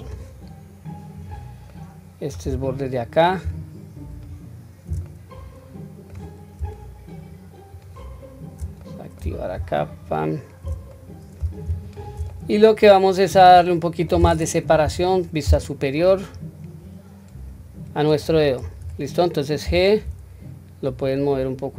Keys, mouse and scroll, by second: 0.9 click, 1.4 middle click, 3.8 alt+shift+click, 4.8-5.9 middle drag, 7.5 shift+click, 8.6 middle click, 9.6 alt+shift+click, 10.6-11.1 middle drag, 11.6 alt+shift+click, 12.0-12.5 middle drag, 12.9-14.0 middle drag, 14.6 KP_7, 16.9 click, 18.3 ctrl+z, 19.4 g.